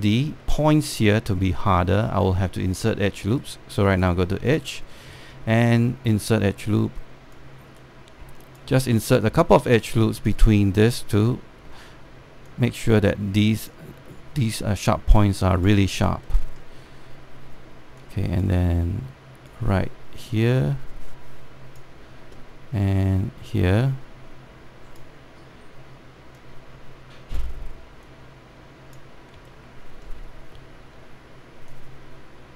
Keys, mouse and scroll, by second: 1.1 alt+middle click, 2.3 alt+middle click, 4.1 right click, 5.2 click, 6.4-8.0 shift+right drag, 8.0-11.8 drag, 12.0 alt+middle click, 13.1-16.7 drag, 16.7 alt+scroll down 1, 18.7-24.1 drag, 25.1-30.1 drag, 30.5 alt+middle click, 32.4-32.5 drag.